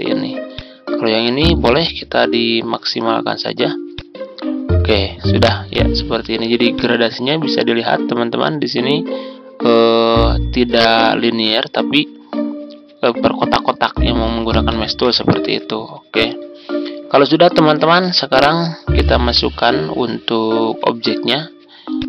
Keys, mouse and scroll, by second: 14.6 shift+click, 15.0-15.4 typing, 17.1 ctrl+scroll down 1, 17.8-18.9 ctrl+scroll up 1, 19.1 Tab, 21.0 Tab, 21.9-22.0 drag.